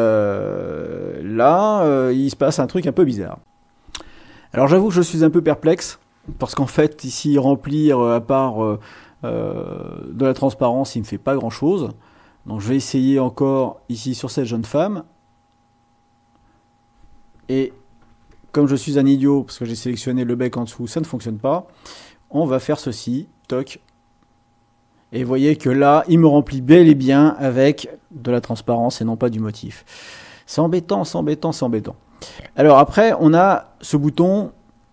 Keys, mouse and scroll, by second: 3.4 click, 6.9-11.4 drag, 12.7-14.1 drag, 14.6 click, 18.1 ctrl+z, 20.9 click, 22.0 click, 23.4 click.